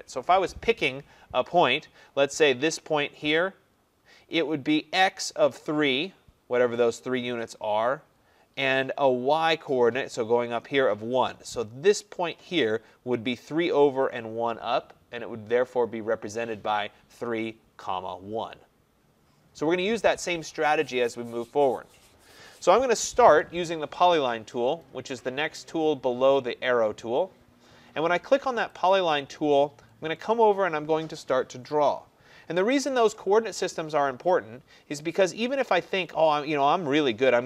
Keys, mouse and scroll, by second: 28.9 click, 36.5-37.1 scroll, 37.2-37.4 scroll.